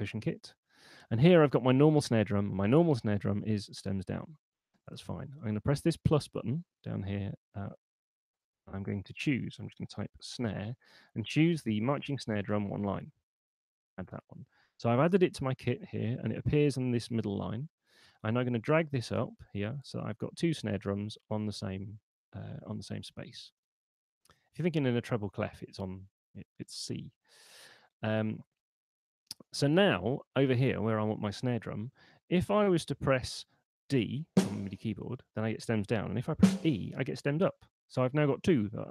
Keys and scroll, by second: 9.7-10.8 typing, 27.3 super+2, 33.0 5.